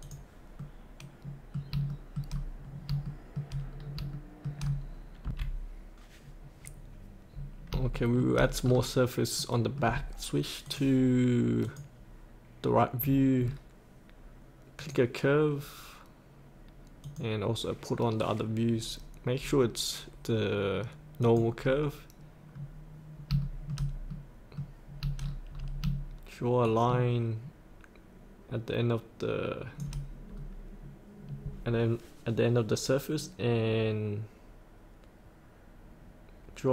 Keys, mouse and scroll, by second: 0.0 click, 0.6 middle click, 1.5 scroll up 1, 1.9 shift+middle click, 2.5-2.9 scroll down 1, 3.0 shift+middle click, 3.7 scroll down 1, 4.1 shift+middle click, 5.2 F8, 6.2-6.6 scroll down 1, 6.6-7.7 scroll up 1, 7.8 shift+scroll up 1, 7.9 shift+middle click, 8.6-9.3 scroll down 1, 9.3 middle click, 10.6 click, 13.0-13.5 scroll down 1, 14.8-22.2 drag, 22.6-23.4 scroll up 1, 23.4 middle click, 25.3-25.8 scroll down 1, 26.7-29.8 shift+drag, 30.2 scroll down 1, 33.2-36.7 drag.